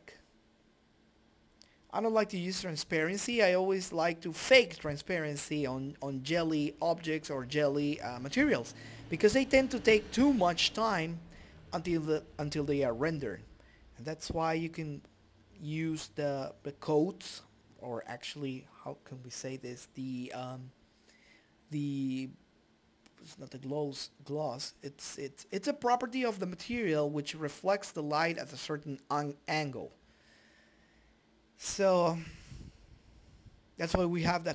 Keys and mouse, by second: 2.5 click, 5.6 click, 6.1-7.2 drag, 7.4 click, 8.6-10.1 drag, 11.1-12.3 drag, 12.3 click, 13.0-14.0 drag, 13.9 KP_2, 16.1-19.3 drag, 20.7-22.3 drag, 27.3-33.3 drag.